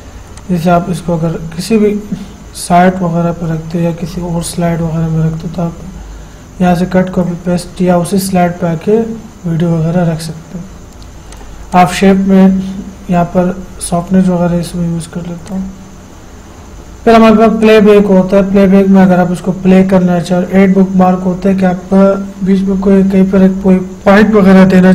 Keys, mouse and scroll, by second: 11.6 click, 15.7 click, 17.9 click.